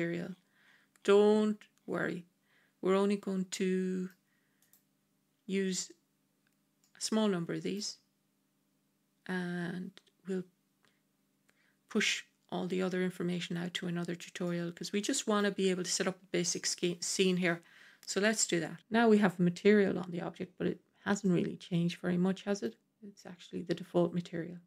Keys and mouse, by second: 3.4-4.0 middle drag, 4.5 click, 6.7-7.7 middle drag, 14.3-15.3 middle drag, 21.1-22.5 middle drag.